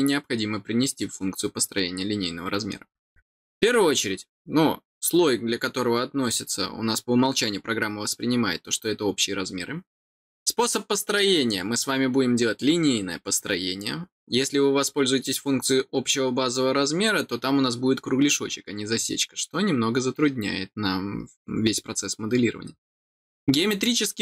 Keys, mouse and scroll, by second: 23.6 click.